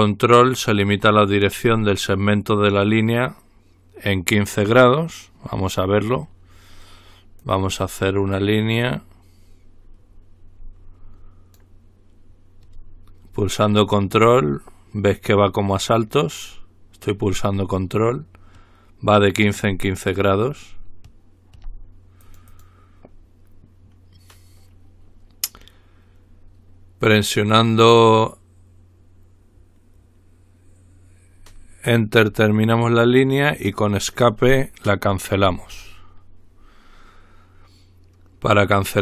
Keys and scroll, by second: 35.7 Escape.